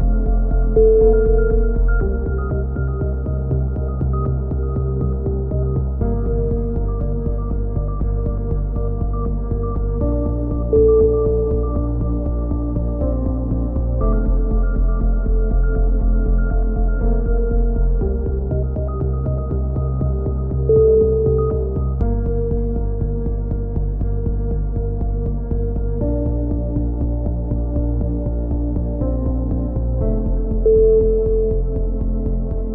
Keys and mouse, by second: 1.9 KP_7, 3.1-4.2 drag, 4.4 right click, 5.2 click, 5.2 KP_7, 6.5 click, 7.7 s, 9.3 click, 12.9 a, 13.1 b, 14.3-16.0 middle drag, 15.2 e, 16.0 click, 19.5-22.0 middle drag, 20.5 s, 23.6 click, 24.0 c, 25.5 click, 26.2 s, 29.2 click, 29.5 a, 30.0 z, 30.4 Tab, 30.8 a, 31.1 click.